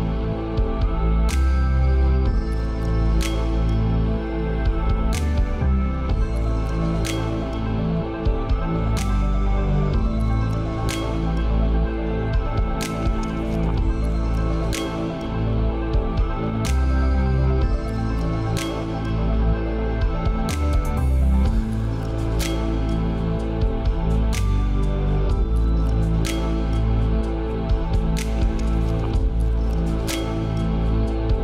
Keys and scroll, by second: 19.0 ctrl+space.